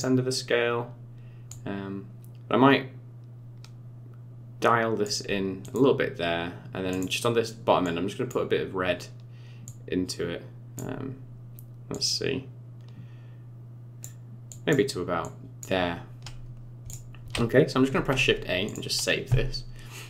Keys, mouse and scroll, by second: 1.4 click, 5.6 click, 6.9 click, 11.9 click, 14.5 click, 15.2 click, 16.4 scroll down 5, 16.8 click, 17.9 ctrl+s.